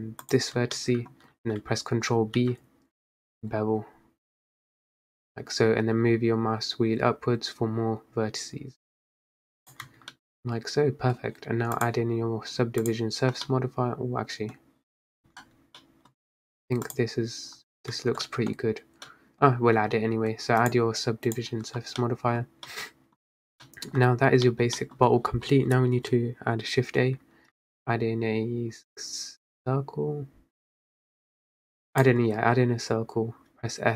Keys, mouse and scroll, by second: 0.3 alt+shift+click, 0.8-2.5 middle drag, 2.5 ctrl+b, 10.0 Tab, 10.2-11.3 middle drag, 11.3-11.8 scroll down 1, 13.0 click, 13.5-14.7 middle drag, 14.7-15.2 scroll down 1, 15.2 drag, 15.5 Tab, 15.9-16.4 middle drag, 16.4-17.0 scroll up 1, 17.0 click, 18.0 Tab, 18.4 middle drag, 18.6-19.2 scroll down 2, 19.2-20.7 middle drag, 20.7-22.1 drag, 22.1-22.6 middle drag, 22.6 scroll down 1, 22.8 middle click, 23.4 scroll up 1, 23.5 scroll down 2, 23.7 middle click, 24.0 scroll up 4, 24.6-25.1 middle drag, 25.1-25.4 scroll down 4, 27.6 shift+a, 32.5-33.6 scroll up 4, 33.6 s.